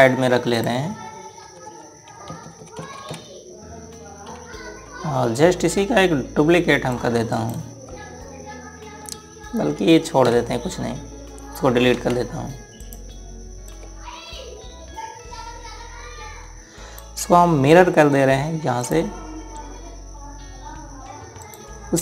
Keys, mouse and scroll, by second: 2.2 Left, 5.0 Right, 7.7 click, 8.1 right click, 11.0 Right, 12.7 Delete, 13.6 click, 19.6 click.